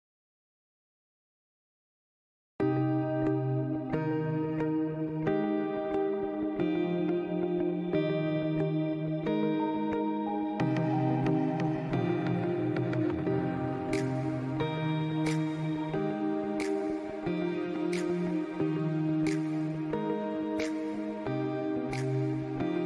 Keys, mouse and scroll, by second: 0.7 click, 1.8 alt+scroll up 1, 2.0 scroll down 1, 2.2 alt+scroll up 1, 2.4 click, 2.6 click, 2.9 click, 4.5 click, 5.0 click, 5.0 space, 5.3 click, 6.6-7.1 alt+scroll down 2, 6.9 click, 7.3 click, 7.7 alt+scroll up 1, 8.3 alt+scroll down 1, 8.4 scroll up 1, 8.6 scroll down 1, 8.7 alt+scroll up 1, 8.8 click, 9.0 click, 9.2 alt+scroll up 1, 9.3 click, 10.3 click, 12.2 click, 12.3 scroll down 1, 12.7-13.9 drag, 14.0 click, 14.1 scroll down 1, 14.3-16.2 drag, 17.4 click, 17.7 alt+scroll down 1, 17.9 click, 18.9 ctrl+z, 19.0-20.3 drag, 20.7 click, 21.1 click, 21.5 ctrl+z, 21.6 click.